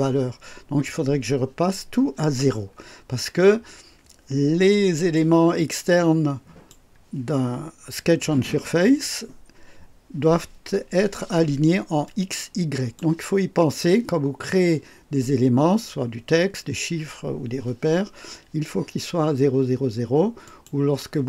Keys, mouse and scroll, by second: 5.6-6.9 drag, 12.0-13.1 drag, 20.4 click.